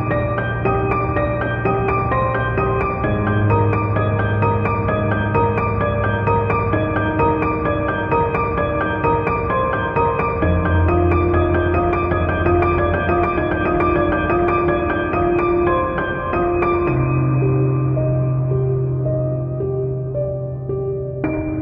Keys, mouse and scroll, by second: 0.0 Tab, 0.4 Tab, 0.4 middle click, 0.4-2.1 typing, 0.6 middle click, 1.1 Tab, 1.3 shift+click, 1.5 Tab, 1.5 shift+middle click, 1.9 shift+click, 2.4-4.8 middle drag, 3.2 z, 3.5 Tab, 4.8-6.9 typing, 5.1 click, 5.4 click, 5.7 middle click, 5.9 shift+middle click, 6.1 alt+click, 6.2 click, 6.3 scroll down 1, 6.7-8.2 shift+middle drag, 8.1 3, 8.2 click, 8.7 Tab, 8.7 shift+click, 8.8 Tab, 9.1 x, 9.4 click, 9.7 shift+click, 9.9 middle click, 10.2 middle click, 10.2-12.1 typing, 10.4 ctrl+click, 10.5 middle click, 10.9 Tab, 11.7 shift+click, 11.8-13.3 middle drag, 13.4 scroll up 2, 13.5 shift+middle click, 13.6 scroll down 2, 13.6 z, 13.7 middle click, 13.8 drag, 13.9 z, 14.0 shift+middle drag, 14.1 click, 14.1 shift+middle click, 14.9 click, 15.0-17.7 typing, 15.2 scroll up 1, 15.3 alt+click, 15.6 Escape, 16.0 scroll down 1, 16.9 Return, 17.2 alt+click, 17.2 middle click, 17.6 scroll up 1, 18.0 click, 18.3 ctrl+b, 19.1 middle click, 19.2 shift+click, 19.2 scroll up 1, 19.3 shift+middle click, 19.5 g, 20.0 shift+click, 20.1 shift+middle click, 20.3 ctrl+r, 20.8 click, 20.9-21.6 scroll down 2, 21.0 middle click, 21.4 Tab.